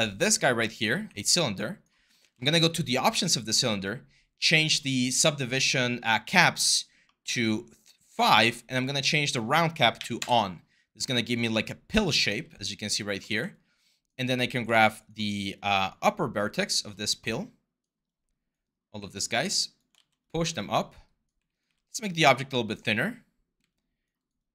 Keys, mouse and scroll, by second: 0.8 w, 2.0 ctrl+a, 9.7 typing, 10.0 Return, 11.3-12.7 typing, 13.0 ctrl+z, 14.5 ctrl+z, 18.5 typing, 19.7 ctrl+z, 20.4-22.6 typing.